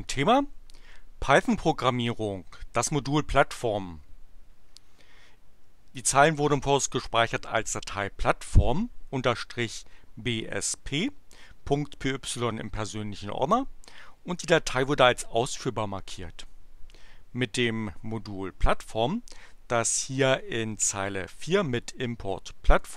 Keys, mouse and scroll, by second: 20.5-21.8 drag, 22.6 click.